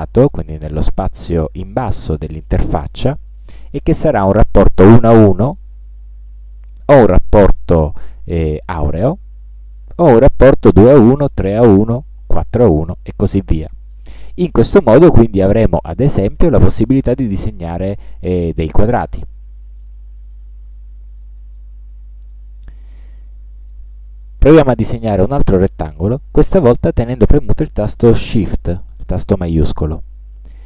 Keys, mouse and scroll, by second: 21.7 click, 23.1 scroll down 2, 23.6 scroll up 2, 26.7-30.6 drag.